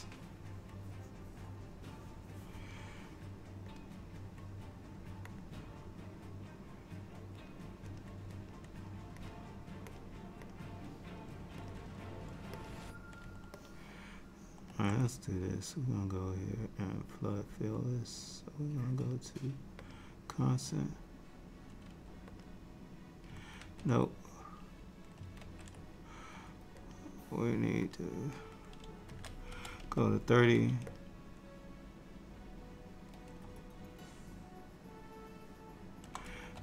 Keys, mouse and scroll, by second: 3.9 click, 5.4 click, 8.0 click, 9.3 click, 10.5 click, 13.6 ctrl+middle click, 17.1 click, 25.5 ctrl+z, 26.9 click, 34.8 alt+middle click.